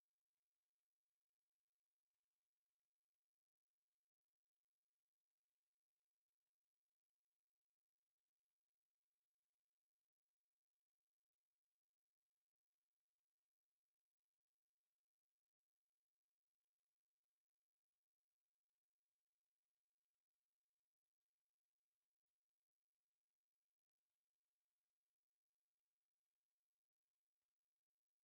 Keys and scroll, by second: 0.0-0.4 typing, 1.6 Escape, 2.3 c, 2.6 Escape, 3.0 m, 3.1 space, 5.1 Escape, 8.0 Escape, 9.9 space, 10.9 Escape, 12.7 Escape, 16.7 Escape, 17.0 m, 17.0 space, 18.4 c, 19.3 Escape, 22.8 Escape, 23.3 space, 28.0 Escape.